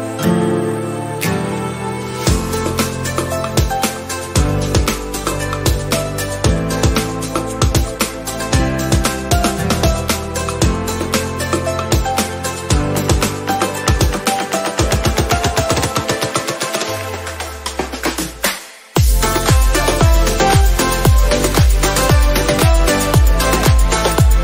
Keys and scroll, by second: 1.0 ctrl+z, 18.7 ctrl+z.